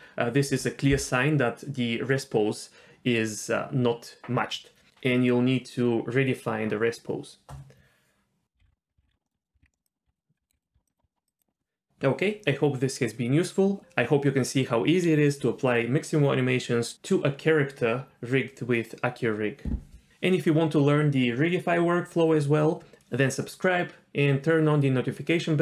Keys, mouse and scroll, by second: 8.6 alt+a, 8.7 alt+r, 8.7 alt+g, 9.0 alt+s, 9.1 alt+g, 9.2 middle click, 9.5 z, 9.6 alt+r, 10.0 click, 10.3 click, 10.5 g, 10.7 a, 11.2 click, 11.2 middle click, 11.2 z, 11.4 click.